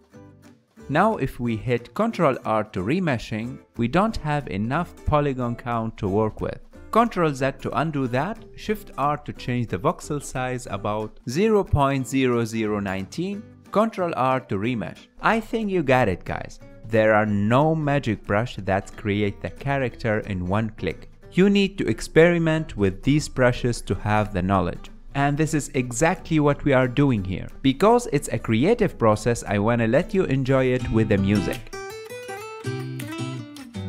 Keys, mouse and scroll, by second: 0.8 ctrl+middle click, 1.2 ctrl+r, 2.3-4.9 middle drag, 4.9 ctrl+z, 5.4-7.3 ctrl+middle drag, 7.3 shift+r, 9.9 shift+r, 12.1 shift+r, 16.4 ctrl+r, 17.2-19.4 ctrl+middle drag, 19.4-23.5 shift+drag, 23.5 KP_1, 24.8-26.2 ctrl+middle drag, 26.2 click, 26.7 f, 27.6 click, 28.5 ctrl+z, 28.8-30.4 drag, 30.4-32.0 ctrl+middle drag, 32.0 click, 32.3 KP_3, 32.4 f, 32.5 click, 33.1 ctrl+middle click, 33.2 ctrl+z, 33.3 click, 33.7 ctrl+middle click.